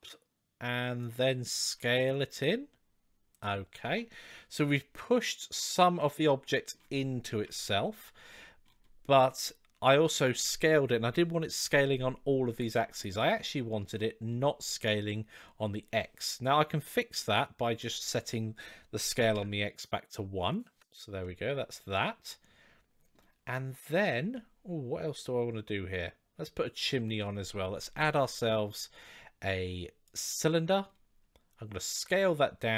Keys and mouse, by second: 1.4 s, 3.6 click, 3.8 middle drag, 3.9 click, 5.5-6.5 middle drag, 7.1 KP_1, 13.2-13.6 middle drag, 17.6-20.6 right drag, 21.0-22.9 middle drag, 24.1-27.0 middle drag, 27.4 shift+a.